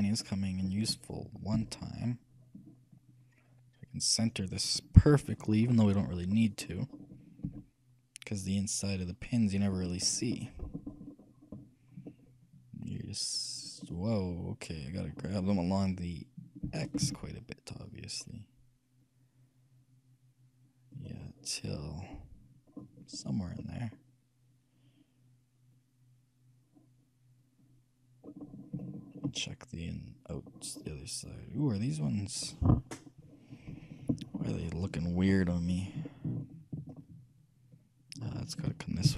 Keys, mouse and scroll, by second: 0.2-1.8 shift+middle drag, 1.8 shift+g, 5.7-9.2 middle drag, 7.7 g, 10.1-14.2 middle drag, 16.8 g, 21.5-23.0 middle drag, 23.0 scroll down 1, 23.1-25.4 middle drag, 28.6-31.3 middle drag, 31.3 scroll up 1, 31.5-32.3 scroll down 1, 32.3-32.8 scroll up 1, 32.8-34.6 middle drag, 35.7 middle click, 35.9-36.4 scroll up 1, 36.4-37.9 middle drag.